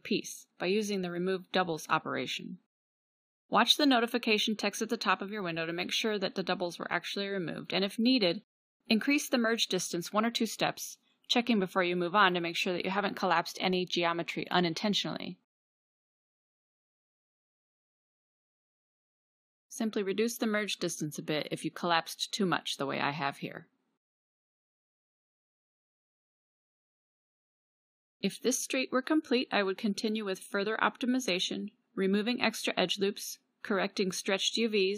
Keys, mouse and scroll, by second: 2.2 ctrl+v, 7.7 n, 11.0-19.2 drag, 20.9 middle click, 22.3 middle click, 22.5 middle click, 28.3 ctrl+s, 32.5 middle click, 33.6 =.